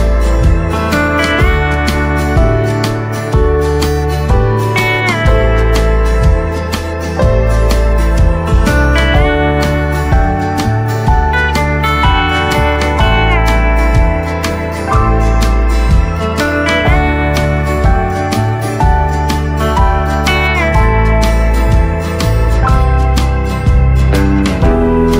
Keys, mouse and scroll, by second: 0.5 right click, 1.8 click, 6.3-7.9 right drag, 7.9 click, 8.3-9.9 right drag, 9.9 click, 13.1 right click, 14.5 click, 17.1 right click.